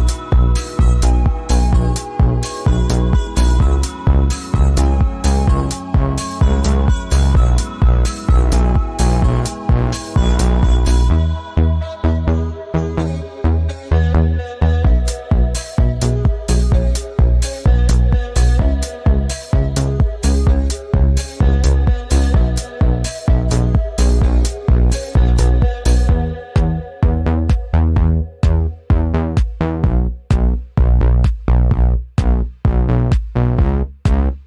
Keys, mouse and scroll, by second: 9.2 click, 12.5 click, 14.4 click, 16.3-18.5 drag, 18.8-21.6 drag, 21.6-23.7 drag, 23.7 shift+z, 25.6-27.1 drag, 27.1 ctrl+z, 28.0 click, 29.7-33.0 drag, 33.0-34.4 drag.